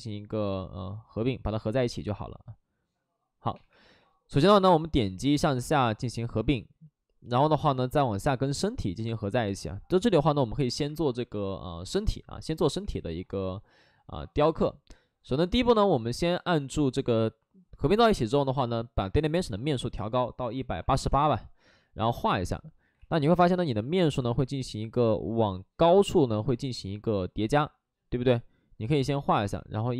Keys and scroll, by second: 1.4 ctrl+z, 3.6 2, 10.6 alt+s, 12.5 3, 12.8 3, 13.6 ctrl+z, 20.2-21.3 typing, 22.9 ctrl+z, 23.2 ctrl+d, 23.8 shift+f, 24.7 ctrl+z, 25.7 d, 26.4 Escape, 26.9 ctrl+d.